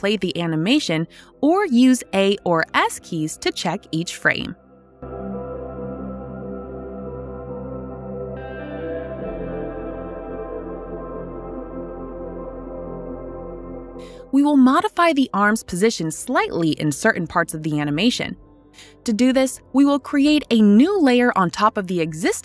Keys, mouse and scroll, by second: 4.2-7.1 typing, 8.5-10.5 typing, 14.2 click, 17.4 click, 20.6 click.